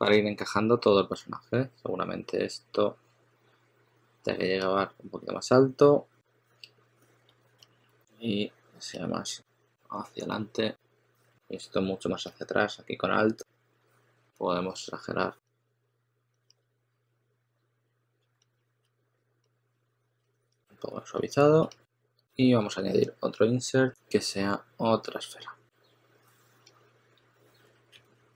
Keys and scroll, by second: 1.1 s, 7.5 s, 8.8 s, 11.2 s, 12.0 2, 18.3 s, 19.0 2, 21.5 s, 23.6-24.3 typing, 27.4-28.3 typing.